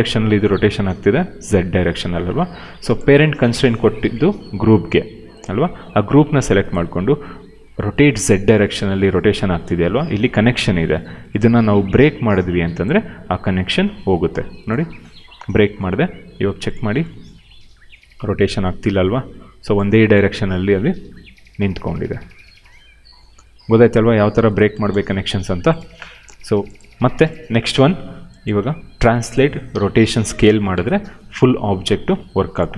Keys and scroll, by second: 1.7 ctrl+z, 9.6 ctrl+z, 24.6 0, 24.7 Return, 28.5 w, 29.3 ctrl+z, 29.6 e, 30.3 ctrl+z, 30.6 r, 31.4 ctrl+z.